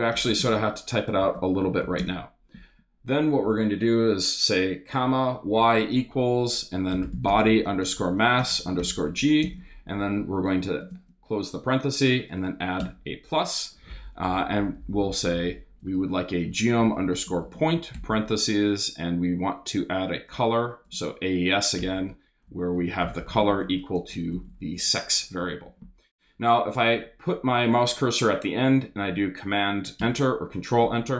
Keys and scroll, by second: 0.0-2.0 typing, 6.7-9.4 typing, 10.6 shift+=, 10.8 shift+space, 12.8 Return, 14.5-24.8 typing, 25.4 Up, 26.1 Down, 30.0 super+Return.